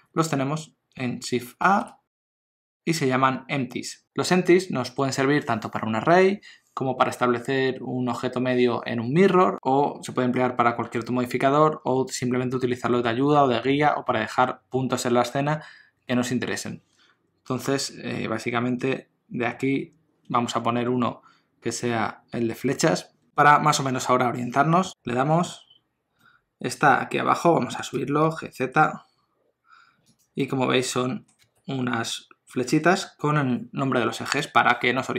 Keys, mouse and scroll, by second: 1.6 shift+a, 26.2 middle click, 27.9 g, 30.4 middle click, 31.4 g, 35.0 middle click.